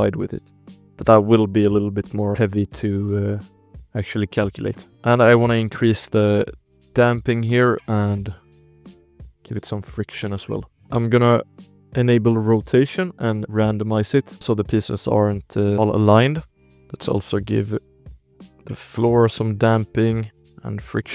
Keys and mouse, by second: 2.9 alt+a, 3.9 space, 4.4 space, 6.4 click, 7.9-9.6 drag, 10.0 ctrl+s, 10.7-11.8 drag, 13.0 drag, 13.4 click, 14.2 alt+a, 14.3 ctrl+s, 14.3 space, 14.6 shift+click, 14.9 click, 15.5 shift+drag, 16.0 drag, 16.4 space, 17.2 click, 18.9 click, 20.1-21.1 drag.